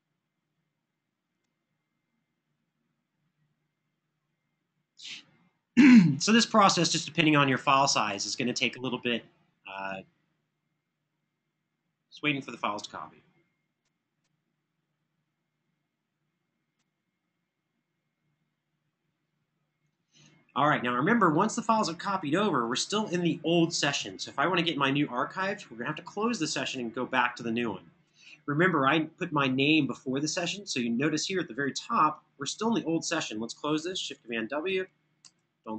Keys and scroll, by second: 33.9 super+w, 35.1 super+d.